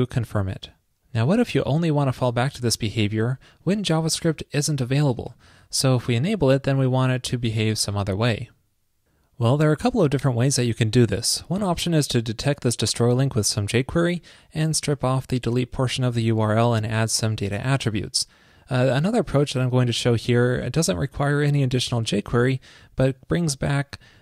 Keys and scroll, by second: 2.3 super+,, 23.4 super+v.